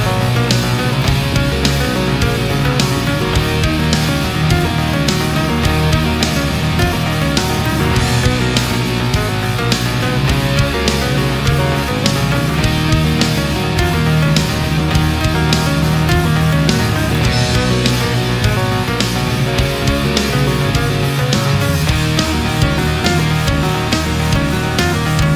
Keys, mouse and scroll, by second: 0.5 click, 1.6-2.7 middle drag, 3.2 right click, 4.0-5.5 drag, 5.7 right click, 6.9-7.4 middle drag, 7.7 ctrl+z, 8.4-9.0 ctrl+middle drag, 10.4-11.2 shift+middle drag, 11.9 right click, 12.5 shift+right click, 13.1 shift+right click, 13.7 shift+right click, 14.4 shift+right click, 14.7-15.4 shift+middle drag, 15.7 shift+right click, 16.5 shift+right click, 17.0 shift+right click, 17.5 shift+right click, 18.1-19.7 shift+drag, 19.9-25.2 middle drag.